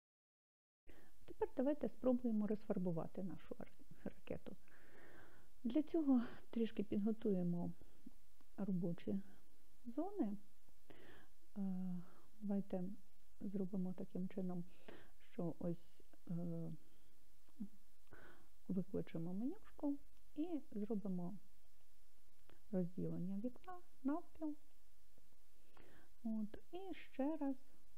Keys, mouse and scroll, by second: 19.2-25.2 right drag.